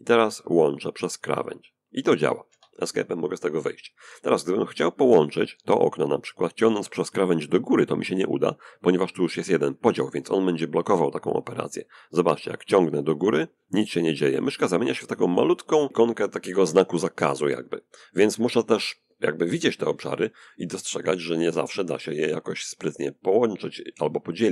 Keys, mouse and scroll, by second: 0.1-2.1 drag, 1.5 Escape, 11.6-19.3 drag, 20.6-23.1 drag.